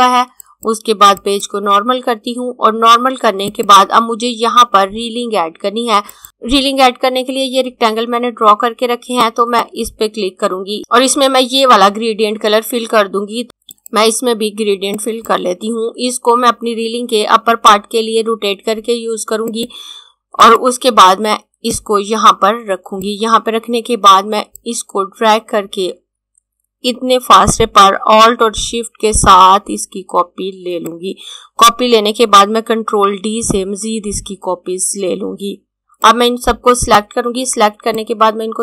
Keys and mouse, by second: 0.2 click, 5.8 click, 9.2 click, 13.8 click, 19.3 click, 32.9 ctrl+d, 33.4-34.8 typing, 35.8 click.